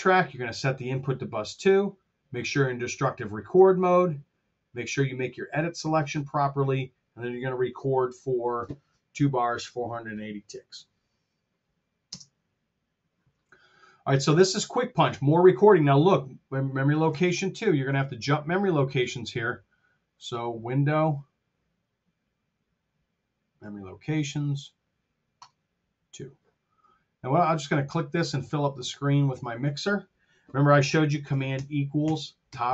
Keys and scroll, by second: 12.0 space, 17.3 super+Tab, 31.6 super+=.